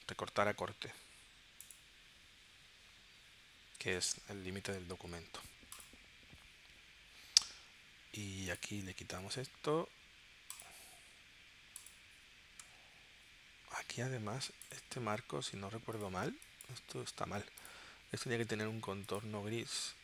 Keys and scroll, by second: 12.6 w, 16.2 space.